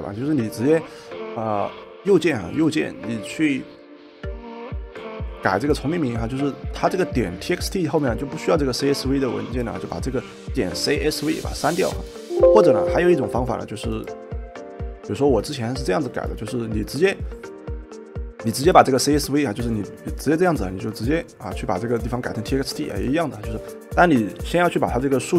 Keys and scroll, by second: 11.4 BackSpace.